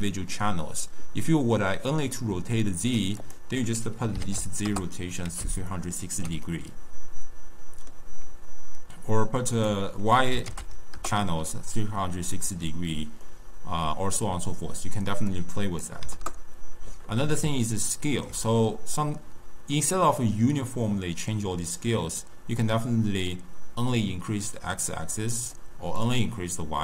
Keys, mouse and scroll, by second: 3.2-5.7 drag, 5.7-9.5 ctrl+middle drag, 9.5-12.5 drag, 13.2-15.3 middle drag, 15.3-17.6 drag, 17.6-21.5 ctrl+middle drag, 22.5-25.6 drag, 26.0-26.8 drag.